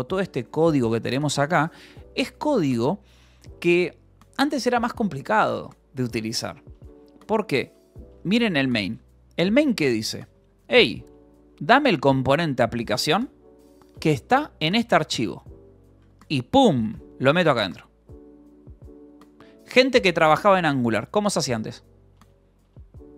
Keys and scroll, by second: 0.2 space, 0.8 u, 7.3 ctrl+l, 8.3 j, 8.8 Return, 10.2-15.9 typing, 11.4 Escape, 13.5 Escape, 15.7 Escape, 17.3 shift+v, 19.2 Escape, 19.3 k, 19.6 j, 20.3 o, 20.5 Return.